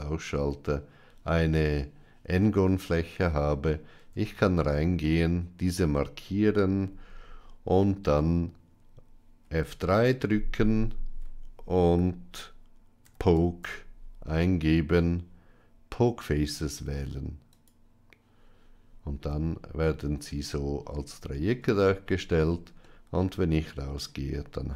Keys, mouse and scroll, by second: 3.9 Tab, 5.0 click, 10.1 F3, 21.5 Tab, 22.8-23.9 middle drag.